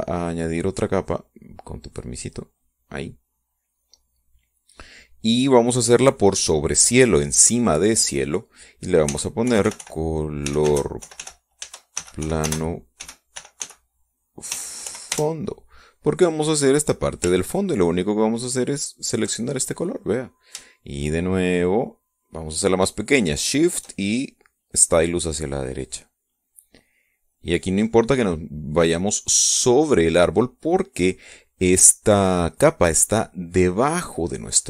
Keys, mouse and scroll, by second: 0.8 click, 1.6-2.8 drag, 3.2 click, 4.8 click, 8.6 click, 9.5-15.5 typing, 15.7 Return, 19.2 ctrl+click, 21.3-24.6 shift+drag, 25.5-30.7 drag.